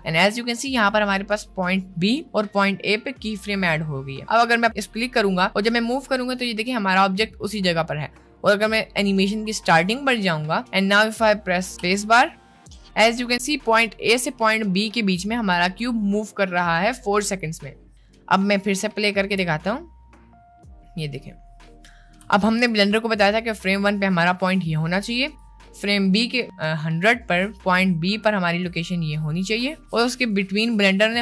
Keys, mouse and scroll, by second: 4.7-7.1 drag, 11.7 space, 15.7 space, 17.0 click, 18.3-18.9 middle drag, 19.5 space, 22.3 space, 22.8-23.6 drag, 24.2 middle click, 25.5-26.3 drag, 27.9 middle click, 29.0 middle click, 29.9-31.2 drag.